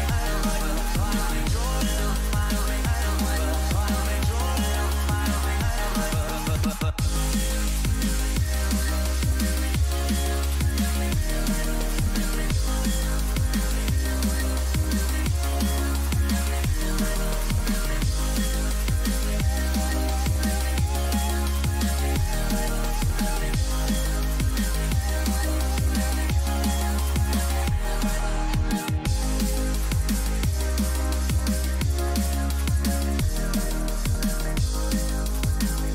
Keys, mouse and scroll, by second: 4.2-6.9 middle drag, 6.9 a, 7.4-9.2 right drag, 8.4-10.3 middle drag, 10.0 Delete, 14.0-15.3 middle drag, 14.7 a, 15.3 right click, 17.4 KP_3, 19.6 z, 22.2 ctrl+b, 31.5 a, 32.0 middle click, 33.1 z, 35.3 middle click.